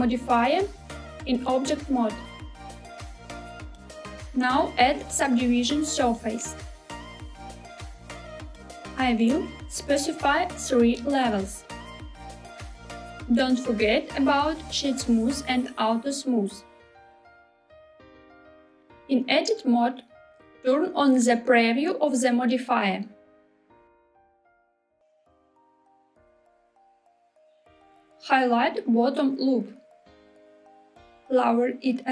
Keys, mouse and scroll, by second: 1.2-3.3 drag, 3.4-8.2 drag, 8.7 click, 10.0 click, 13.4-15.0 right drag, 15.7 click, 18.0 click, 19.2 Tab, 22.7 click, 24.5 click, 24.9-27.2 middle drag, 24.9-25.5 scroll up 2, 27.9 click, 28.5 click, 28.7 click, 30.1-31.1 middle drag, 31.2 g.